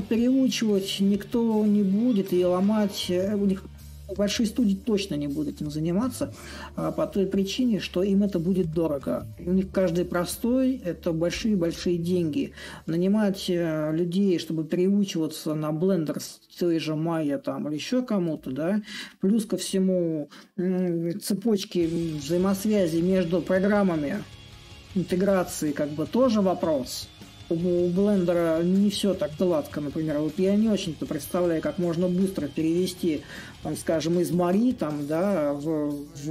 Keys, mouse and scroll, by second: 0.0-14.0 middle drag, 14.0-17.6 drag, 17.6-23.3 middle drag, 23.8-29.3 middle drag, 29.3-31.3 right drag, 31.3-36.3 middle drag.